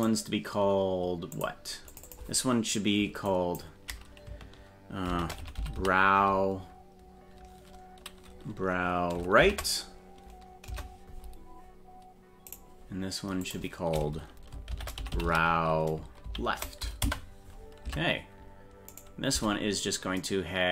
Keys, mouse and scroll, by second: 1.3 click, 1.9-11.2 drag, 12.5 right click, 13.4-17.6 drag, 17.9 Tab, 18.9 right click, 19.3 Tab.